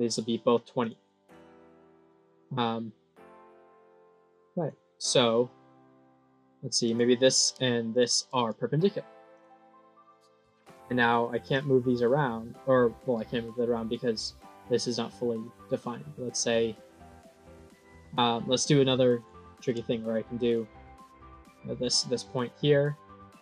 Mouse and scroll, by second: 0.7 click, 2.3-4.5 drag, 4.9 click, 6.8 click, 7.8 click, 9.2 click, 9.8 click, 11.4-13.6 drag, 14.8-16.3 drag, 17.8 click, 19.1 click.